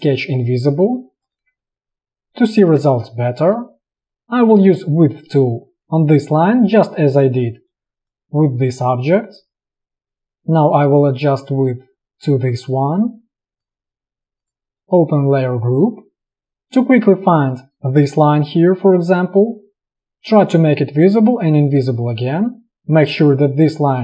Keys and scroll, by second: 1.0 space, 3.0 space, 6.9 space.